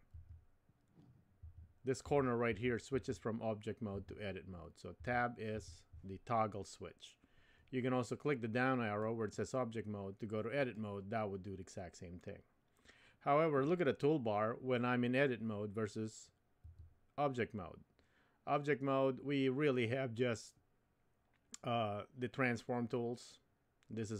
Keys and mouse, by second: 0.1 Tab, 1.4 Tab, 2.1 Tab, 2.5 Tab, 2.9 Tab, 4.0 Tab, 5.0 Tab, 5.5 Tab, 9.0-10.7 drag, 16.6 Tab.